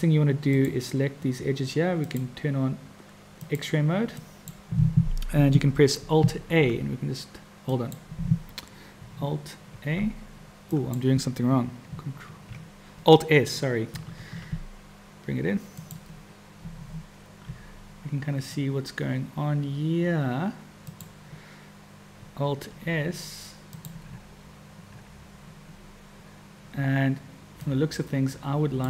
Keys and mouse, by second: 0.4 click, 2.0 click, 3.4 click, 4.3 click, 6.4 alt+a, 7.7 click, 9.7 alt+a, 10.8 click, 12.1 ctrl+a, 14.2 alt+s, 17.5 g, 22.7 alt+s, 27.7-28.8 drag.